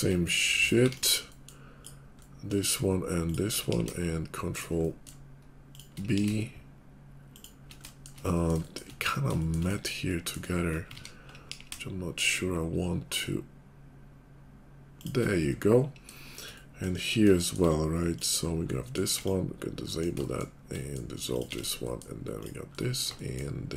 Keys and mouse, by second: 0.8 x, 3.2 shift+click, 3.8 ctrl+b, 3.8 ctrl+click, 4.1 shift+click, 5.1 shift+click, 6.1 ctrl+b, 6.1 ctrl+click, 6.5-10.9 shift+middle drag, 11.1 ctrl+z, 11.5 ctrl+b, 15.7 middle click, 16.1 shift+click, 16.4-18.1 middle drag, 18.1 click, 18.4-20.2 middle drag, 19.1 x, 20.2 shift+click, 20.6 middle click, 21.3 click, 21.5-22.7 middle drag, 21.5 x.